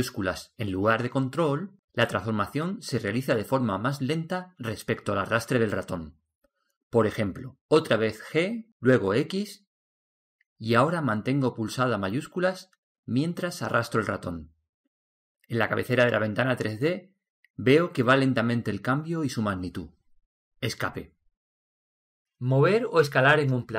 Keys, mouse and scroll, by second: 9.2 g.